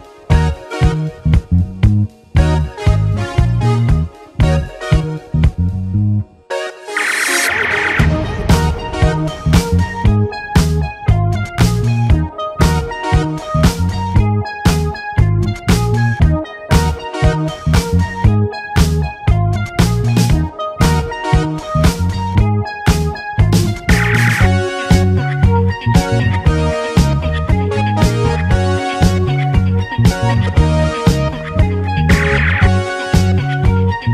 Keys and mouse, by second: 0.4-2.0 drag, 2.2-3.4 drag, 3.2 a, 3.4 u, 4.8 ctrl+z, 4.8 click, 5.0 ctrl+z, 5.1 2, 6.9 u, 7.1 shift+click, 9.7 click, 9.9 2, 10.1 click, 10.9 shift+click, 11.1 alt+z, 12.3 shift+u, 12.8-15.1 shift+drag, 15.1 shift+g, 15.6 s, 16.2 alt+shift+h, 16.9 click, 16.9 a, 16.9 Tab, 18.7 shift+click, 19.4 shift+click, 19.8 shift+click, 20.0 shift+click, 20.4 alt+shift+a, 20.9 shift+middle click, 21.1 middle click, 22.2 middle click, 22.6 middle click, 22.8 middle click, 23.3 middle click, 25.3 middle click, 26.2 middle click, 27.4 shift+click, 27.5 shift+click, 27.8 click, 28.4 click, 29.6 shift+KP_3, 29.7 shift+click, 29.9 Tab, 31.4-32.8 drag, 32.8 l.